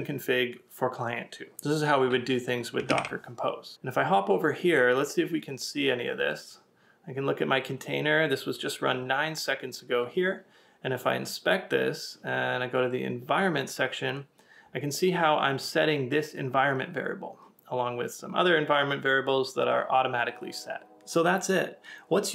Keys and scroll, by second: 2.9 super+Tab.